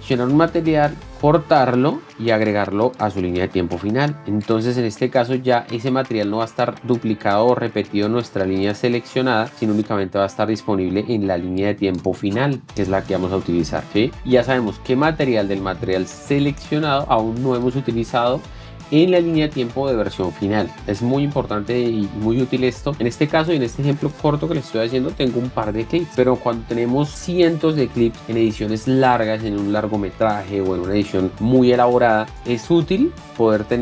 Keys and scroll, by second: 1.2 ctrl+x, 3.8 ctrl+v, 8.2 x, 9.5 ctrl+v.